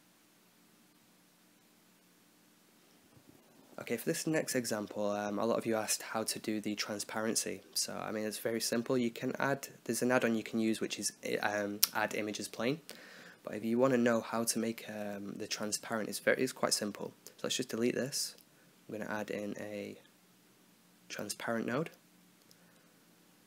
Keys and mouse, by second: 0.0 middle click, 0.8-5.4 drag, 6.0-7.1 right drag, 7.4-8.7 middle drag, 9.6-10.7 drag, 10.7-11.8 drag, 16.8 right click, 17.5 x, 17.7 shift+a, 22.7-23.4 drag.